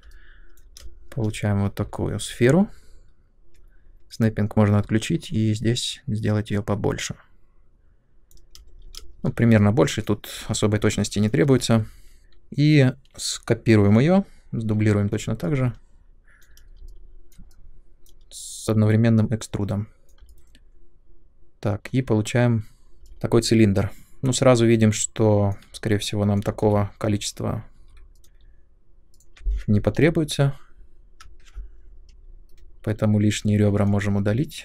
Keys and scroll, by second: 0.8 ctrl+space, 8.5 space, 14.6 w, 23.0 space, 26.6 3, 27.7 2, 30.4-31.2 Up, 32.5 Delete.